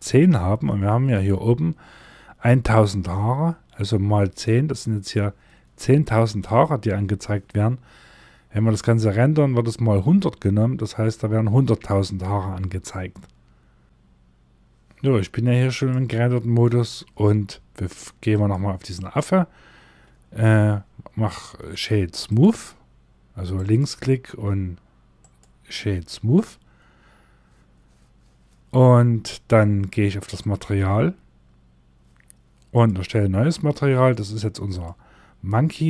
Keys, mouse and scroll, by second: 2.0 scroll down 1, 14.9 click, 18.1 right click, 30.1 click.